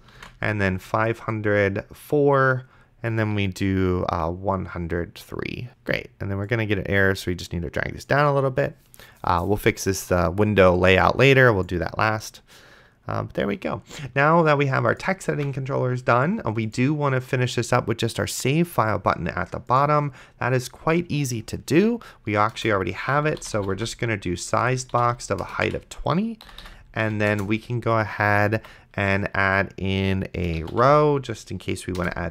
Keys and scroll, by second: 0.4 ctrl+s, 15.6 ctrl+s, 22.8 Return, 23.0-27.0 typing, 24.5 Return, 26.5 Delete, 26.6 End, 27.3 Return, 28.6 Escape, 30.5-31.3 typing, 32.0 Return.